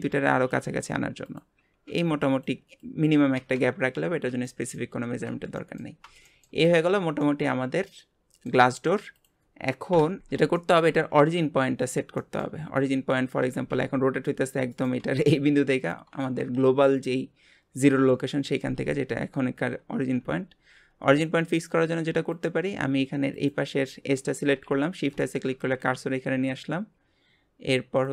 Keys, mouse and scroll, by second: 3.6 scroll down 4, 4.1 Tab, 4.5-5.1 middle drag, 5.1 alt+z, 5.2 alt+scroll down 3, 5.6-6.0 middle drag, 6.0 scroll down 3, 6.3-6.7 shift+middle drag, 6.7 click, 7.2-9.1 middle drag, 9.1 click, 9.9 KP_Divide, 10.2-10.6 scroll down 2, 10.6-11.0 shift+middle drag, 11.0-12.2 scroll up 5, 12.2-12.6 shift+middle drag, 12.6-13.0 scroll down 7, 13.4 r, 19.0 scroll up 4, 19.6 scroll up 3, 20.2 Tab, 20.7 Tab, 21.1 Tab, 22.3 click, 22.7 scroll up 2, 23.3 click, 24.6 shift+s, 25.5 Tab, 28.0-28.1 drag.